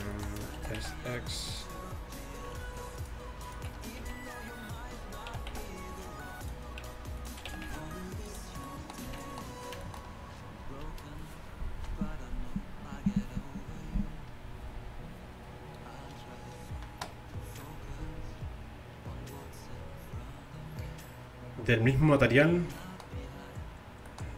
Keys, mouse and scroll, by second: 0.6 s, 3.0 click, 3.8-5.4 right drag, 4.1 z, 5.4 s, 7.2-8.6 right drag, 7.5 s, 9.1 z.